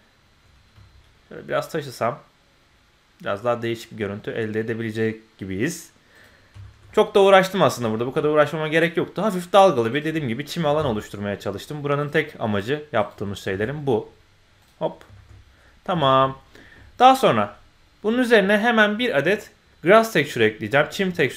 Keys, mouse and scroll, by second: 6.6 shift+middle click, 6.9 middle click, 7.7 click, 7.9 scroll down 1, 8.1-9.4 middle drag, 9.9 click, 10.1 scroll up 1, 10.3 middle click, 10.6 g, 13.0 click, 13.1 g, 14.8-15.4 scroll down 2, 15.1 shift+middle click, 15.4-16.0 scroll up 2, 16.0 shift+middle click, 16.3 middle click.